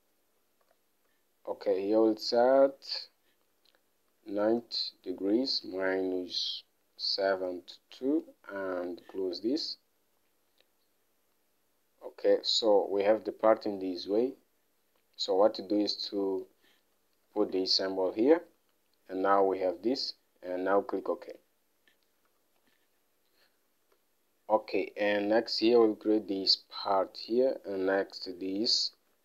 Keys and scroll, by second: 1.1 *, 4.5 9, 6.1 -, 7.3 7, 7.8 2, 9.1 (, 17.6 -, 22.7 Home, 24.0 alt+Tab.